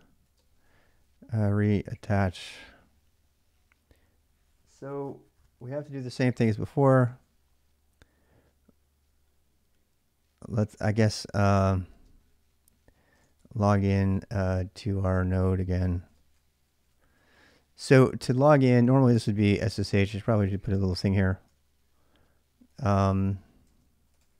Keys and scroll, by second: 0.0-2.1 typing, 10.2-10.5 BackSpace, 10.8 BackSpace, 11.0 BackSpace, 11.7 space, 12.7-17.4 typing, 19.3-24.3 typing.